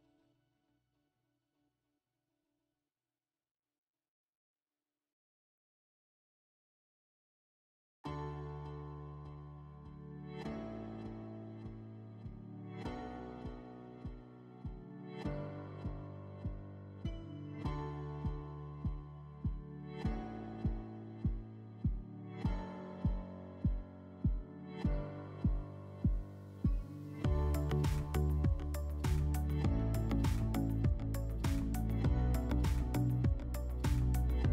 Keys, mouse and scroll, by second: 0.9 click, 2.4 click, 3.5 click, 4.5 click, 5.2 click, 7.4 click, 33.4 click.